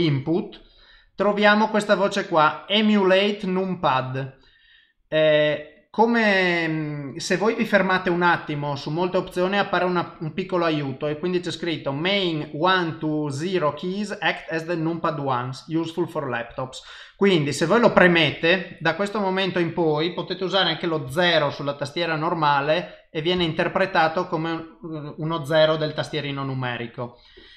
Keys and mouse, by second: 19.3 click, 20.0 middle click, 21.0 KP_0, 22.5 middle click, 23.3 KP_0.